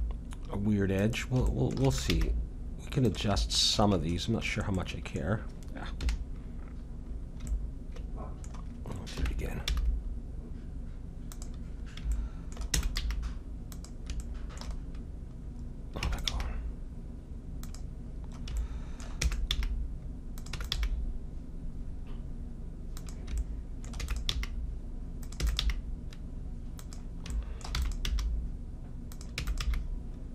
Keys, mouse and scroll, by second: 1.5-2.8 middle drag, 1.8 e, 2.1 g, 5.9 KP_1, 9.1 KP_1, 9.6 g, 10.2-12.1 middle drag, 12.8 e, 13.0 g, 14.8-16.0 middle drag, 16.0 e, 16.3 g, 18.0 middle click, 19.2 e, 19.5 g, 20.6 e, 20.8 g, 23.4-25.2 middle drag, 24.0 e, 24.3 g, 25.4 e, 25.6 g, 27.4-29.3 middle drag, 27.8 e, 28.1 g, 29.3 e, 29.6 g.